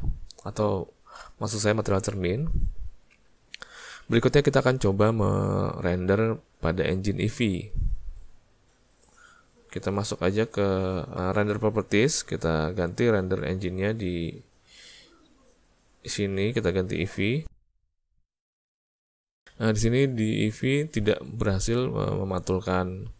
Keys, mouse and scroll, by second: 10.3 click, 13.7 click, 19.9 alt+a.